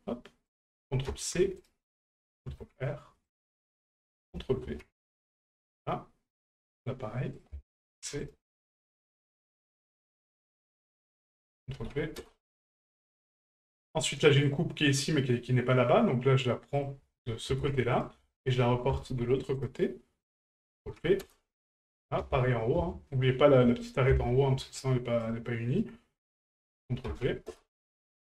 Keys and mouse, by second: 0.5-1.7 ctrl+drag, 4.2 ctrl+click, 6.3 right click, 7.4 ctrl+click, 10.5 click, 11.1-12.2 ctrl+drag, 13.6 shift+middle click, 14.4 right click, 16.7-18.1 drag, 20.5 ctrl+click, 21.9 right click, 26.6-27.6 ctrl+drag.